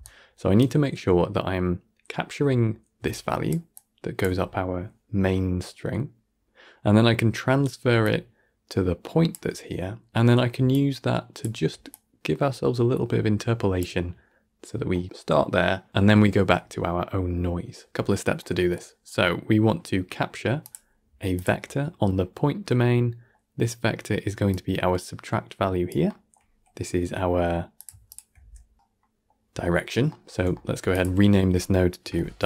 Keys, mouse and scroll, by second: 0.0-0.5 typing, 3.0 click, 3.4 d, 3.6 click, 4.1 d, 7.7 d, 7.9-9.2 drag, 9.2 d, 9.2 d, 9.3 d, 10.4 d, 10.6 click, 11.3 d, 11.8-13.7 drag, 13.7 d, 18.3 middle click, 18.8 scroll up 1, 19.0-19.5 middle drag, 19.5-20.5 scroll up 1, 20.5-21.5 drag, 21.5-22.5 middle drag, 22.5 scroll down 4, 22.7-24.4 middle drag, 24.4 click, 26.0-27.7 middle drag, 27.7 click, 28.0 shift+drag, 28.2 g, 28.8 scroll down 1, 28.9-30.8 middle drag, 30.8 click, 31.9 F2.